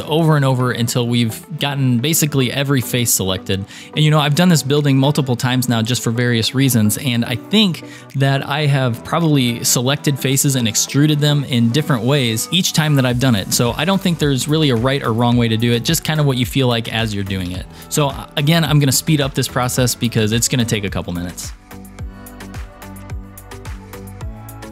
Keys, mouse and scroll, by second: 14.0-16.2 middle drag, 16.3 scroll down 2, 17.5 KP_3, 19.8-21.1 shift+middle drag, 21.6-22.2 shift+click, 22.2 scroll up 3, 22.4 scroll down 3, 22.4 shift+middle click, 22.5 shift+click, 22.7 shift+middle click, 23.1 shift+click, 23.4 shift+middle click, 23.6 shift+click, 23.8 shift+click, 23.9 shift+middle click, 24.1 scroll down 3, 24.2 shift+middle click, 24.3 e, 24.5 shift+KP_3, 24.6 shift+middle click, 24.6 scroll up 3.